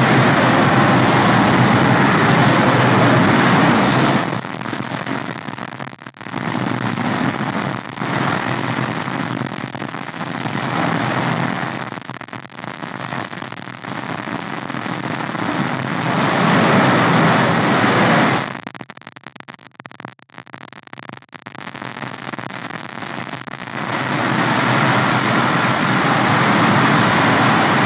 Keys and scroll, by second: 4.5 space, 6.3 space, 7.4 space, 14.9 space, 23.5 space.